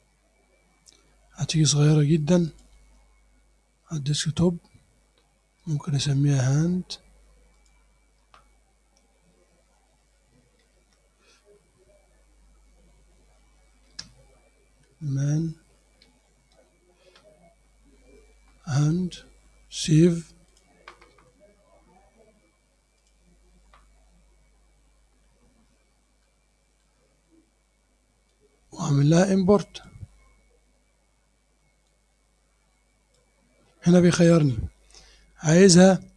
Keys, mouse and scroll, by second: 2.5 click, 7.6 click, 9.5-11.2 typing, 14.0-17.0 typing, 20.5 click, 23.0 click, 25.0-26.1 scroll down 4, 26.3 click, 28.3-30.1 drag, 30.1-31.9 scroll down 2, 31.9-33.4 drag.